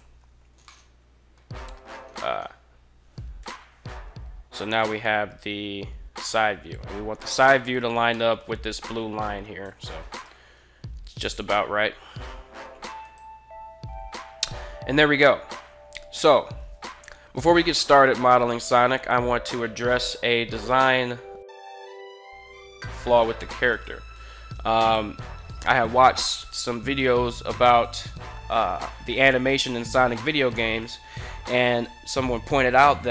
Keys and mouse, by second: 0.4-1.1 middle drag, 3.2 KP_3, 7.9 shift+middle drag, 9.3 g, 9.9 y, 12.7 click, 17.6-18.9 middle drag, 21.8-22.8 middle drag, 23.2 g, 23.5 x, 24.6 click.